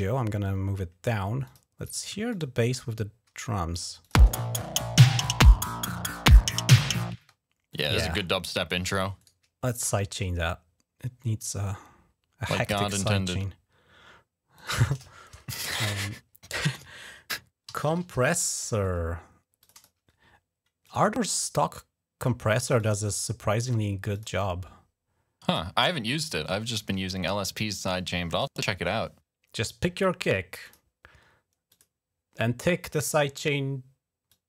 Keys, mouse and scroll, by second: 1.3 click, 2.1 shift+click, 3.5 click, 4.0 space, 7.0 space, 7.5 click, 9.1 right click, 14.4 click, 17.2-18.3 typing, 19.4 click, 20.6 click, 21.9 typing, 22.6 click, 24.0 click, 25.3 click, 28.2 click, 30.5 click, 31.6 click, 34.1-34.4 drag.